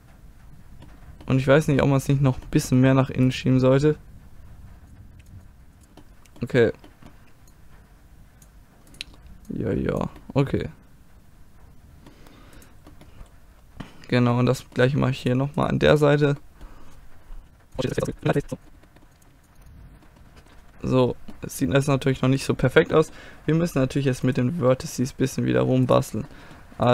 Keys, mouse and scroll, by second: 1.1 middle click, 3.3-4.8 middle drag, 4.8 right click, 5.0 click, 5.8 right click, 5.9-7.6 middle drag, 7.6-11.5 drag, 8.9-10.8 right drag, 10.2 middle click, 11.2 middle click, 12.6-14.3 right drag, 15.3 right click, 15.7 click, 16.4 right click, 17.4 click, 17.9 ctrl+z, 18.0 a, 18.2 right click, 18.3 click, 18.7-19.7 middle drag, 19.1 click, 19.1 right click, 20.0 middle click, 20.6 KP_5, 21.6-24.3 middle drag, 24.3-26.3 drag, 25.9 right click, 26.3-26.9 middle drag.